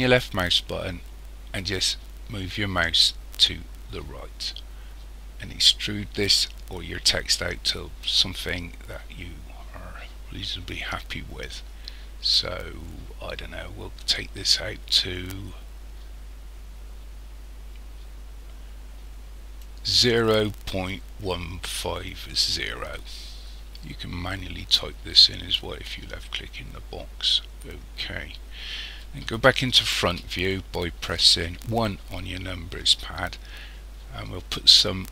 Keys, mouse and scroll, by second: 30.0 KP_1.